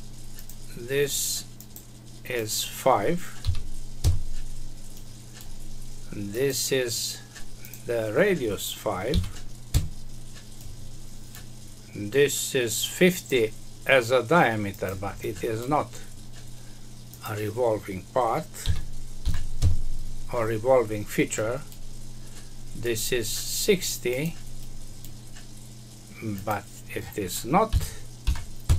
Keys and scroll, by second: 4.0 Return, 9.7 Return, 19.5 Return, 28.6 Return.